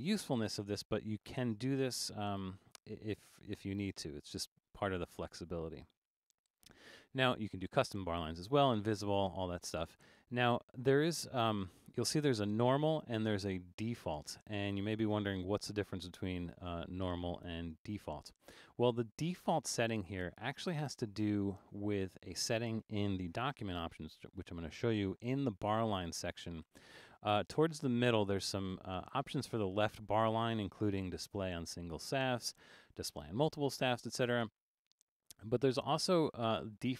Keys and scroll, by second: 23.4 alt+super+a.